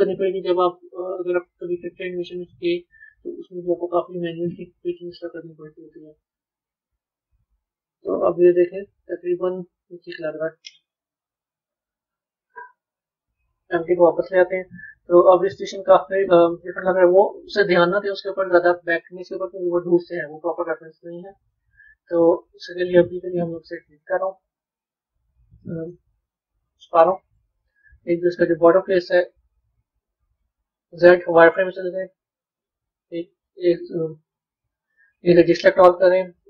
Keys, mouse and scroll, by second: 0.0 shift+click, 0.4-2.5 middle drag, 2.5 shift+click, 6.1-7.3 middle drag, 7.3 Tab, 7.8-11.0 middle drag, 11.1 KP_1, 11.6 KP_3, 13.4 click, 23.8 click, 25.7 click, 26.1 click, 26.7-28.2 middle drag, 28.2 b, 28.7-30.6 middle drag, 32.4 KP_1, 35.9 KP_3.